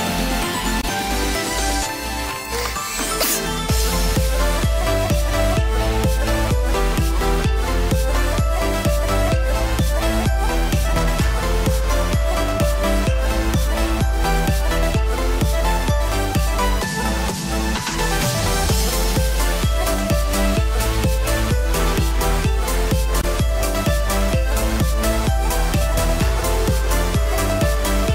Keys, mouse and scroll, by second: 0.9 click, 2.6 middle click, 3.9 KP_3, 4.5 shift+middle click, 5.6 s, 7.3 r, 8.6 g, 10.5 middle click, 11.3-11.7 scroll down 4, 11.5 shift+middle click, 11.8 middle click, 12.4 shift+middle click, 12.6-13.2 scroll up 2, 13.5 alt+click, 13.8-14.3 scroll down 3, 19.3 scroll up 2, 19.5 shift+middle click, 19.8 middle click, 21.1 e, 23.6 middle click, 24.6 e, 26.7 middle click, 27.5 click.